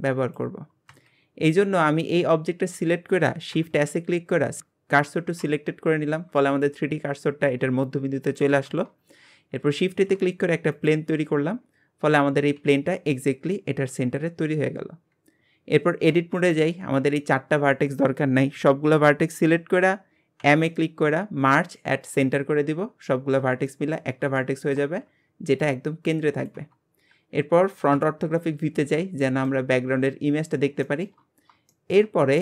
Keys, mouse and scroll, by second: 1.3-2.3 scroll up 1, 2.3-3.5 scroll up 1, 3.5 shift+s, 9.8 shift+a, 11.2-11.7 scroll down 8, 12.6 g, 13.5-14.4 scroll up 4, 14.4 scroll down 4, 15.1 scroll up 4, 16.1 Tab, 17.9 scroll down 1, 20.4 m, 22.6-23.1 scroll up 10, 23.7-27.5 shift+middle drag, 27.9 KP_1, 28.6 scroll down 3, 29.2-30.5 shift+middle drag, 30.5-30.8 scroll up 3, 30.8 shift+middle click, 31.2-31.7 scroll up 1, 31.7 shift+middle click, 32.1-32.4 scroll up 6.